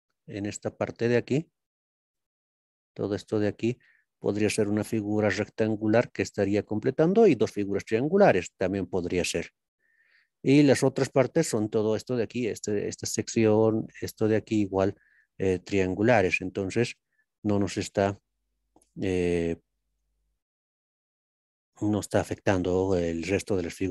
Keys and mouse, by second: 18.3-18.8 middle drag, 19.9 ctrl+KP_3, 21.0-23.4 shift+middle drag, 23.4-23.9 shift+drag.